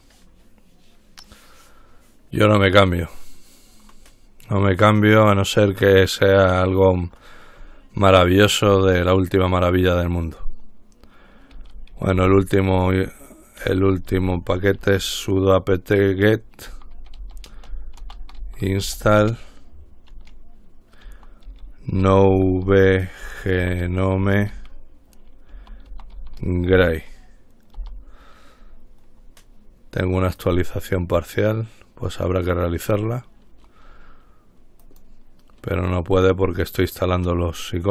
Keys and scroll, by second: 11.6-15.4 typing, 16.6-19.7 typing, 21.0-27.3 typing, 27.9 Return, 28.7 typing.